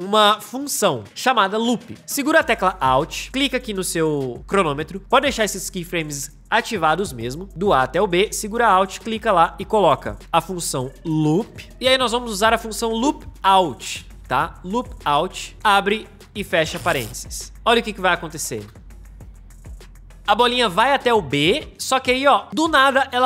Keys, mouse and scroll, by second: 1.0-2.2 drag, 8.8 alt+right click, 10.2 l, 11.0 o, 11.4 p, 13.4-15.5 typing, 18.5 space.